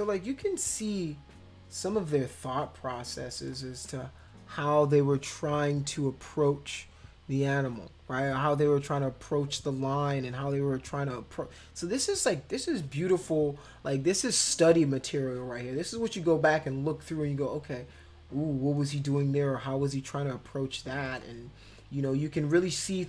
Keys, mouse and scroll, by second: 3.4 click, 13.2 click, 14.6-15.1 scroll down 4, 18.8 click, 21.0 click.